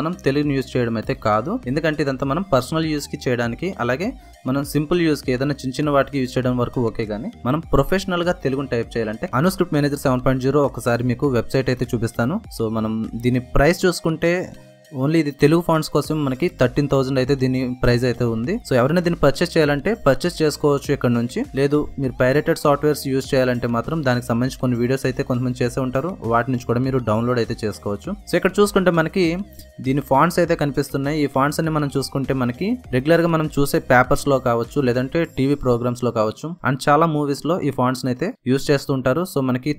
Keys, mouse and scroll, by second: 6.4-7.7 typing, 9.9-12.9 typing, 13.4 click, 20.9-23.6 drag, 20.9 typing, 30.1 click, 30.1 typing, 33.9-39.7 drag, 33.9 typing.